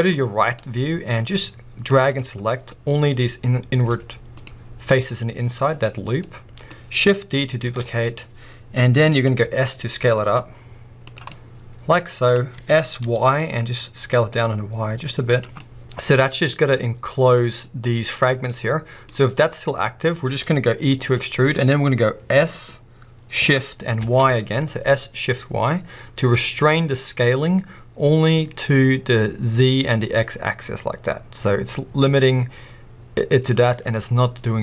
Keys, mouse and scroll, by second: 0.6 click, 2.7 scroll up 2, 6.2-9.2 middle drag, 7.6 shift+d, 9.2 right click, 11.1 click, 11.3 middle click, 15.4 click, 15.6 middle click, 18.5-21.0 middle drag.